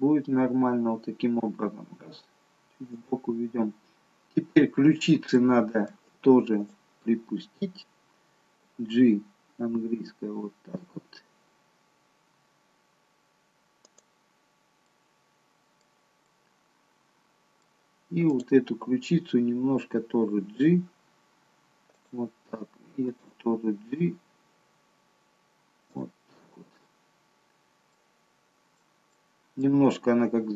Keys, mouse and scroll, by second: 1.4 g, 4.0-5.0 scroll up 2, 5.4 shift+middle click, 6.6 click, 8.6 g, 14.9 middle click, 16.3 middle click, 18.3 click, 20.7 g, 23.1 click, 24.1 g, 26.5-27.0 scroll down 3, 28.0 middle click, 29.1 middle click, 29.8-30.5 scroll up 3.